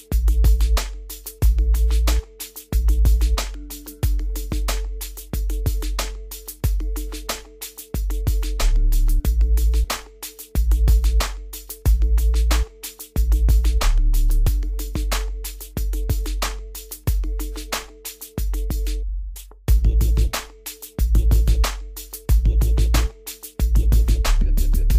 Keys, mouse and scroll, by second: 0.0 right click, 2.4 click, 5.7 scroll down 1, 7.5 click, 7.9-8.2 scroll up 1, 8.2-8.7 scroll down 1, 8.7 scroll, 8.9 scroll down 1, 10.9-11.7 scroll down 1, 12.2 click, 18.3-18.9 scroll up 1, 18.9 click, 23.6 scroll down 1, 24.7-24.9 scroll up 1.